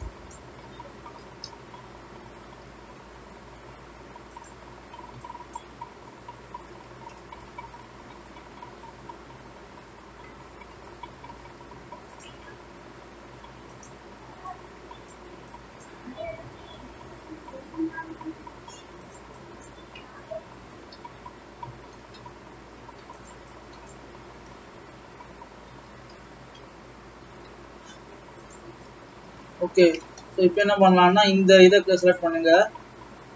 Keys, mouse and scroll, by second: 0.4 click, 1.5 g, 5.6 click, 5.9-7.8 scroll down 3, 7.8-8.3 scroll up 1, 8.3-10.7 scroll up 2, 10.8 g, 13.7 click, 15.9 click, 16.6 g, 19.4 click, 20.6 g, 24.0 click, 24.3-25.0 scroll down 2, 25.0-25.9 scroll down 2, 25.9 e, 28.7-29.5 scroll up 4, 29.8 scroll up 1, 30.2-31.6 middle drag, 31.6 click, 32.2 click.